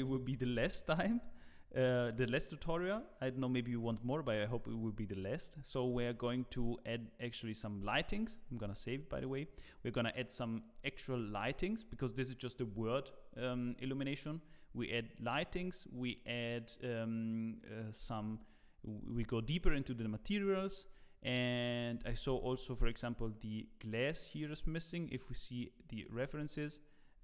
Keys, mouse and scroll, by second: 23.1 z, 25.5 click.